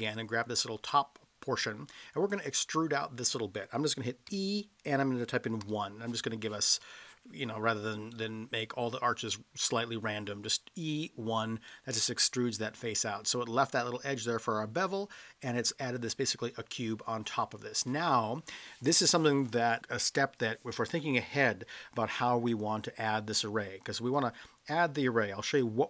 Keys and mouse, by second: 0.0 click, 0.0 3, 4.3 e, 5.6 1, 6.8 click, 8.1-8.4 middle drag, 11.7-12.0 middle drag, 17.4-19.8 middle drag.